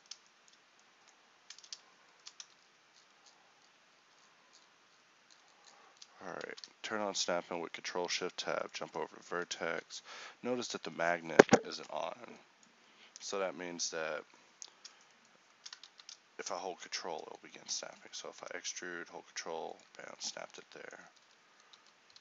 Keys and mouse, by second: 2.5 z, 15.9 click, 16.0 ctrl+z, 17.8 z, 18.5 e, 20.5-22.2 typing.